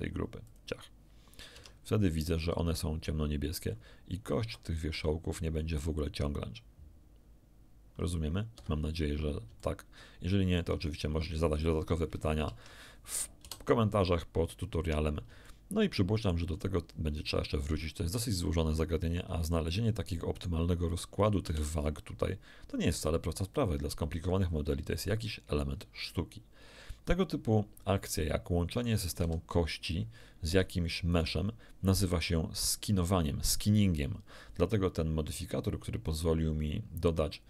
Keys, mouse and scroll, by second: 0.4 click, 1.5 Tab, 4.4 r, 8.5 Escape, 9.2 scroll down 1, 9.6-10.7 shift+middle drag, 12.4 ctrl+Tab, 13.4 a, 15.0 scroll up 1, 15.4-16.4 shift+middle drag, 20.3 right click, 21.4 z, 28.7 right click, 29.2 g, 30.4 Escape, 31.0 right click, 36.0 click.